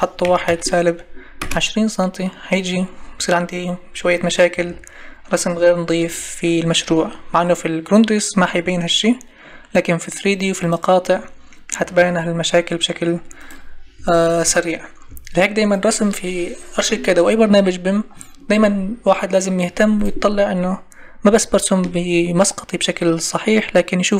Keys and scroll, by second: 1.4 Return, 12.0 ctrl+z, 14.0 Escape.